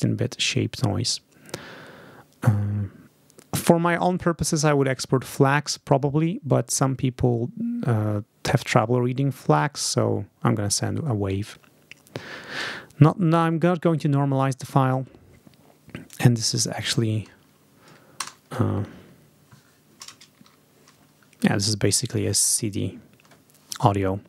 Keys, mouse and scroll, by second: 15.9 click, 18.1 BackSpace, 21.7 click.